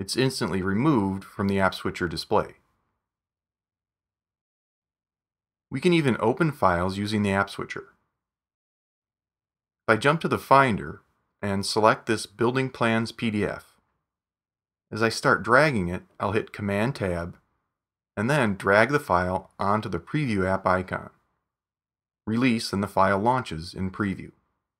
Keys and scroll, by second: 3.5 super+Tab, 9.6 super+Right, 14.0 super+Tab.